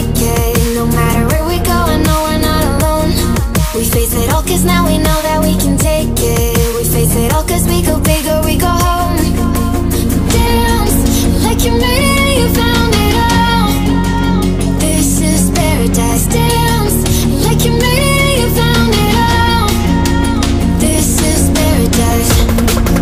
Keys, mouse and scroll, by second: 3.5-6.5 drag, 11.4-17.5 drag, 20.3 click, 22.1 click.